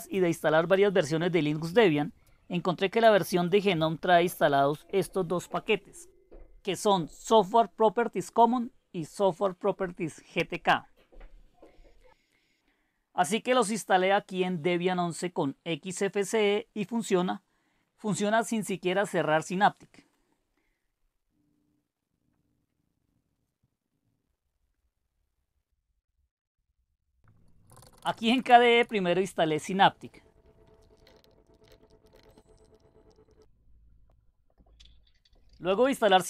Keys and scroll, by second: 13.7 Down.